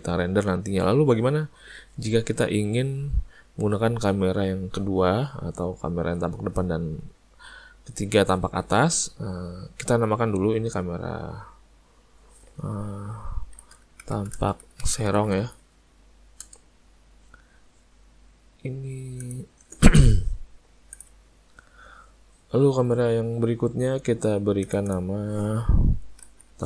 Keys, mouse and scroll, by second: 11.2 click, 11.4 click, 19.2 click, 24.7 click, 24.9 click.